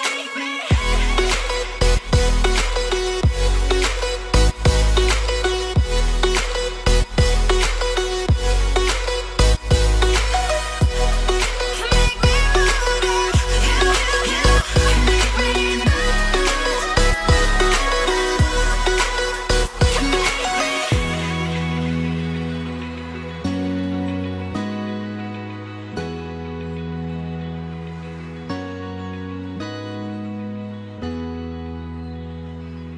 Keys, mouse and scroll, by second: 0.5 Escape, 0.7 scroll down 2, 1.2 shift+middle click, 1.8-2.4 scroll down 3, 2.4 shift+middle click, 13.5-13.9 scroll up 3, 15.3-15.7 scroll down 5, 15.7 middle click, 16.2 scroll up 1, 19.9-20.5 scroll down 1, 20.5 Escape, 20.7 Escape, 21.9 scroll down 2, 22.0 middle click, 23.9 shift+middle click, 27.5-28.2 scroll up 2, 28.2 scroll up 1, 28.2 middle click, 30.6 scroll up 2.